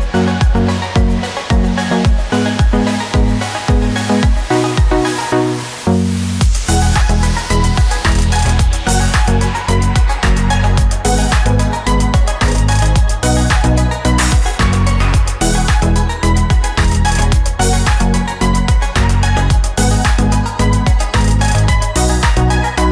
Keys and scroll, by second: 3.2 space, 3.8 ctrl+alt+z, 16.0 ctrl+alt+z, 19.4 ctrl+-, 19.4 ctrl+=, 20.6 ctrl+alt+z, 21.6 ctrl+-, 21.6 ctrl+=.